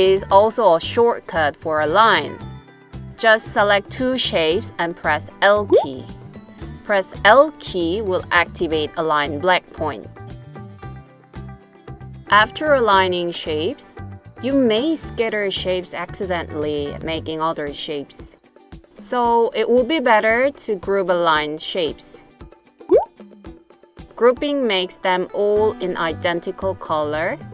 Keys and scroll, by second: 5.8 l.